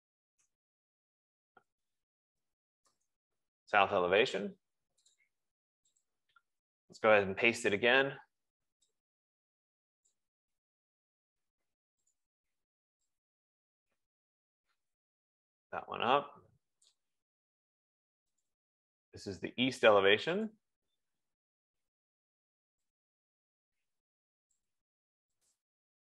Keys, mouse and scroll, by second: 0.0-3.4 typing, 5.4-6.1 typing, 5.6 click, 6.6 click, 8.0 ctrl+v, 10.6 click, 11.2 ctrl+z, 12.6 click, 15.0 F15, 17.3 click, 18.9 click, 19.3 click, 20.6 click, 20.9 click, 24.9 click, 25.9 click.